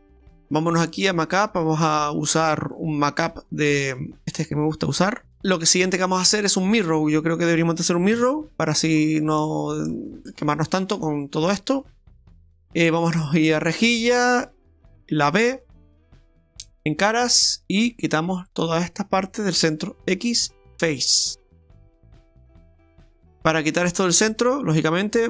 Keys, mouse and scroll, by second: 1.1 click, 4.7-5.3 scroll up 3, 5.3 shift+middle click, 5.4 Tab, 5.4 middle click, 5.4 scroll down 4, 6.1 middle click, 8.1 KP_7, 9.0-9.3 scroll up 2, 9.5 shift+middle click, 11.4 click, 13.5 click, 15.9 b, 20.2 x, 21.1 x, 22.3-22.7 scroll up 1, 23.2-24.1 scroll up 5.